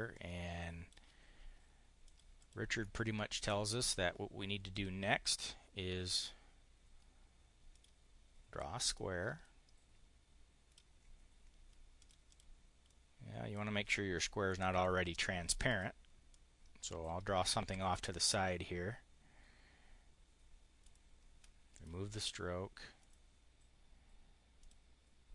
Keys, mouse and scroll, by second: 1.8 click, 2.2 click, 2.6 click, 4.6 click, 7.6 click, 8.8-10.7 drag, 11.8 click, 12.2 click, 12.7 click, 14.4 Delete, 15.6 click, 16.1 click, 20.7 click, 21.7 click, 22.8 click, 24.5 click.